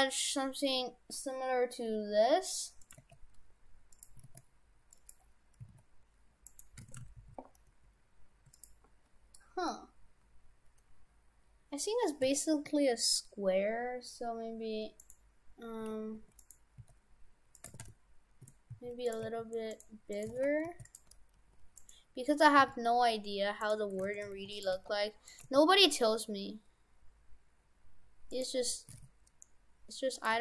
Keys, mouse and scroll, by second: 3.1 g, 4.2 s, 5.7 s, 6.9 shift+f, 12.2 s, 15.9 s, 16.8 s, 17.7 shift+f, 19.3 a, 19.7 right click, 20.3 right click, 20.3 shift+f, 21.1 g, 22.6 s, 24.1 shift+f, 24.7 g, 25.5 g, 28.9 s, 30.3 g.